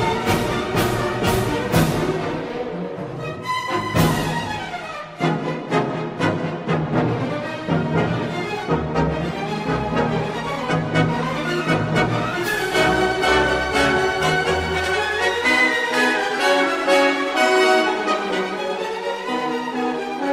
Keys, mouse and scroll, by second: 1.1 shift+Tab, 1.3 shift+middle click, 2.7-5.3 drag, 7.5 d, 10.9 click, 16.8 shift+middle click, 19.1 s.